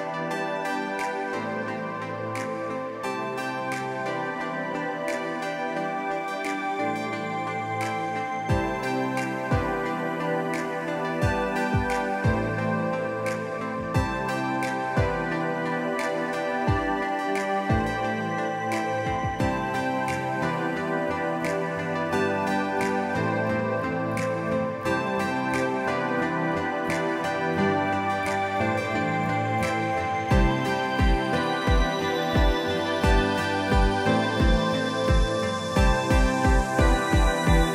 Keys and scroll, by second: 0.6 p, 4.0-5.2 typing, 5.6 Escape, 6.9 m, 9.4-10.9 typing, 11.3 Return, 12.0 Escape, 12.5-13.3 typing, 20.8 typing, 22.0 Return, 25.0 Delete, 25.3 Delete, 25.7 Delete, 32.5 ctrl+x, 33.0 Escape, 33.2 Escape, 35.6 ctrl+v.